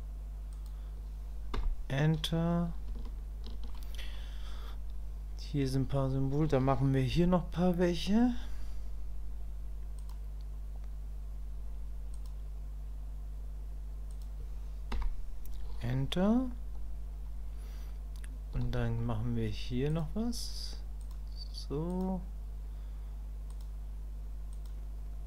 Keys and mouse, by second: 3.1 shift+middle click.